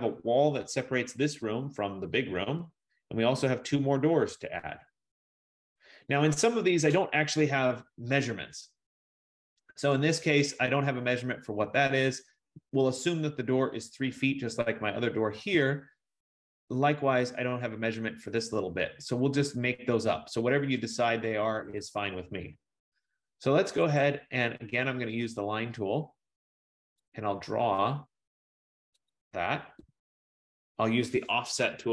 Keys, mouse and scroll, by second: 10.6 F15, 21.0 click, 24.0 click, 27.2 click, 30.0 Return, 31.8-31.9 typing, 31.8 scroll.